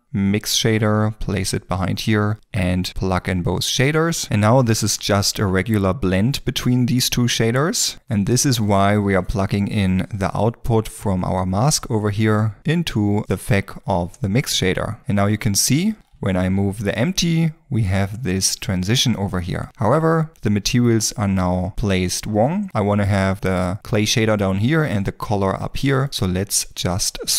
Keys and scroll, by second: 16.6 g.